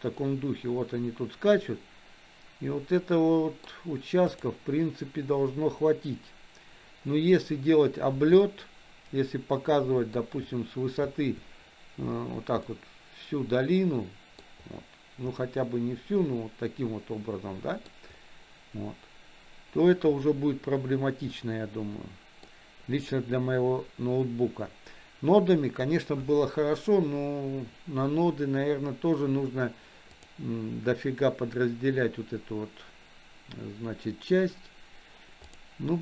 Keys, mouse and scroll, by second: 0.4-4.0 middle drag, 4.6 click, 8.7-10.8 shift+middle drag, 12.9-14.7 middle drag, 15.6-18.3 middle drag, 21.7-22.8 middle drag, 35.8 click.